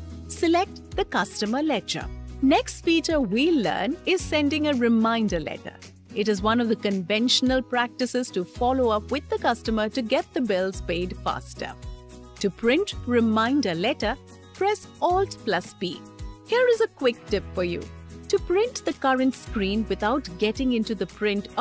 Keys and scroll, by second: 14.8 alt+p.